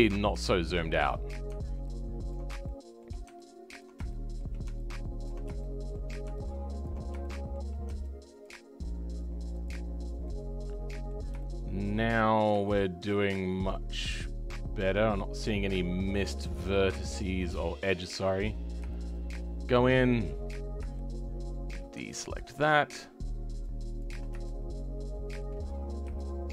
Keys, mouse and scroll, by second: 0.0 ctrl+click, 0.4 shift+middle click, 1.1-2.0 scroll up 1, 2.2 ctrl+click, 2.6-3.7 shift+middle drag, 3.7 ctrl+click, 4.0-5.2 shift+middle drag, 5.2 ctrl+click, 5.5-6.8 shift+middle drag, 6.8 ctrl+click, 7.2-8.4 shift+middle drag, 8.4 ctrl+click, 9.8-10.2 scroll down 2, 10.2-12.2 middle drag, 12.2-12.6 scroll down 2, 12.6-15.6 shift+middle drag, 17.5 middle click, 18.4-18.9 scroll up 2, 18.9-19.9 shift+middle drag, 19.9-20.6 scroll up 1, 20.6-20.9 scroll up 1, 20.9-22.9 shift+middle drag, 22.9 ctrl+click, 23.9 ctrl+click, 24.4-25.6 shift+middle drag, 25.6-26.1 scroll up 2, 26.1-26.5 shift+middle drag.